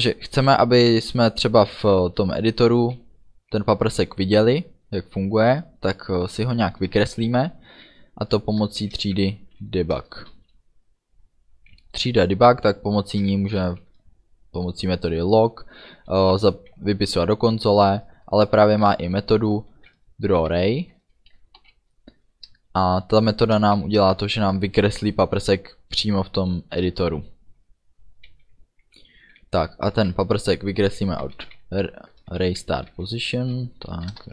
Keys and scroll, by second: 8.8 shift+d, 10.0 Return, 10.4 ., 13.7 shift+l, 18.2 BackSpace, 19.8 shift+d, 20.4 r, 21.7 Down, 22.5 Return, 23.8 shift+9, 31.3-33.6 typing, 34.2 Return.